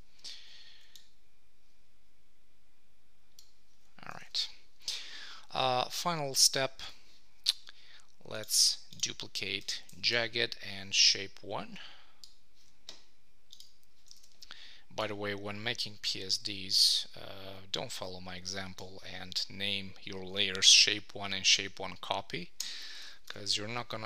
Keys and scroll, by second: 4.2 super+s, 14.2 super+t, 22.6 Return, 23.0 super+s.